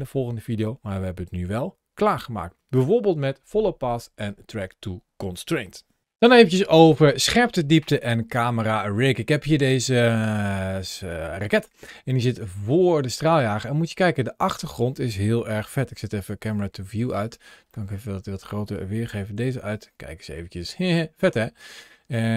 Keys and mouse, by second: 8.2-11.0 middle drag, 11.4 shift+middle click, 11.9 middle drag, 12.4-12.8 shift+middle drag, 15.3 n, 16.0 click, 16.6 n, 17.5-18.1 shift+middle drag, 18.9 t, 20.2 shift+middle click.